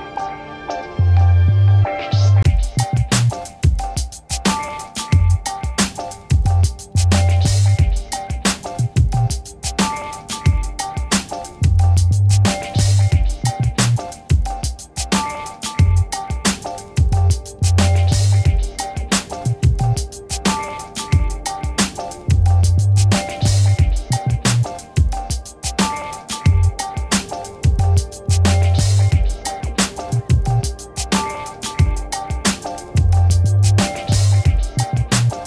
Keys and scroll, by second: 12.0 0, 12.9 f, 13.9 4, 14.3 e, 14.8 Return, 18.1 ctrl+z, 29.1-30.8 typing, 31.5 Return.